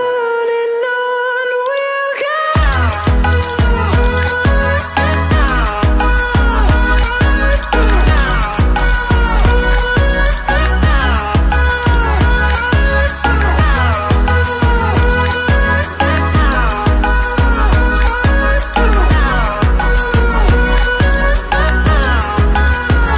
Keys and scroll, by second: 16.4 ctrl+i.